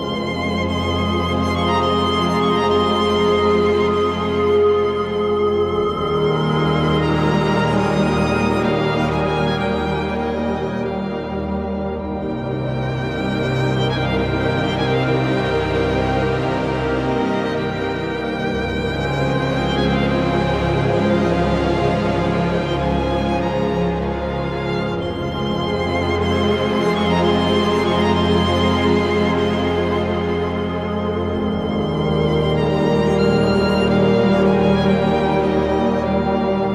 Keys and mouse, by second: 0.3 click, 1.3 click, 5.1 click, 5.9 click, 7.1 click, 8.6 click, 9.5 click, 10.2 click, 10.8 click, 11.4 click, 12.0 click, 12.7 click, 13.8 click, 14.9 click, 15.7 click, 16.7 click, 17.3 click, 18.6 click, 19.1 click, 20.3 click, 21.3 click, 22.3 click, 23.1 click, 26.7 click, 27.7 click, 28.4 click, 29.1 click, 31.0 click, 31.7 click, 32.8 click, 33.5 click, 34.7 click, 36.4 click.